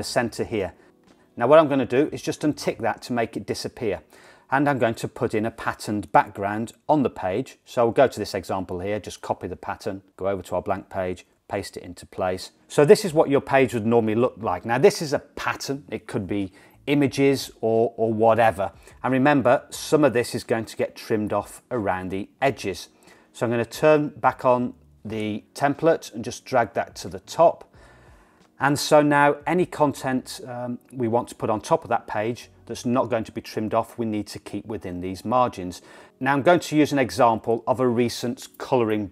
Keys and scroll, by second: 9.2 super+c, 11.4 super+v.